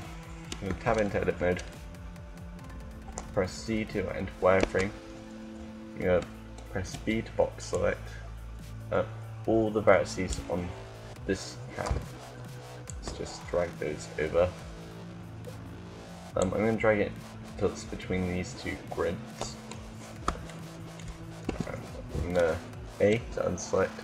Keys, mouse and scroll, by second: 2.7-3.7 middle drag, 2.7 z, 4.3 a, 6.8 b, 8.1 b, 12.5-16.2 drag, 20.3 middle click, 21.3 a, 22.8 b.